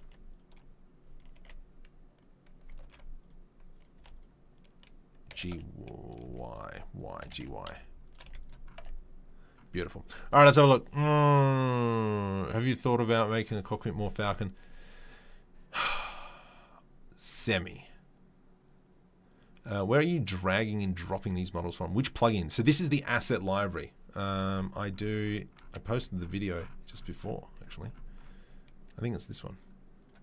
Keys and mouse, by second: 0.0 2, 1.3 1, 2.8 ctrl+r, 3.9 2, 4.1 click, 4.2-30.2 middle drag, 5.3 g, 7.2 g, 8.2 z, 8.8 Tab.